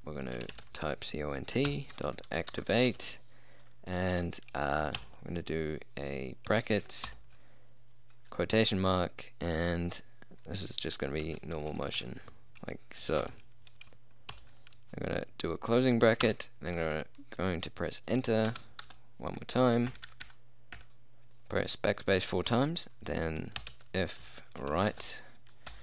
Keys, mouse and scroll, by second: 0.5 c, 0.6 o, 0.6 n, 0.7 t, 1.8-3.1 typing, 5.1 shift+9, 7.2 shift+', 11.3-12.1 typing, 13.3 shift+', 14.4 shift+0, 16.3 Return, 18.6 shift+Return, 20.0-20.3 BackSpace, 20.9 BackSpace, 23.7-25.8 typing.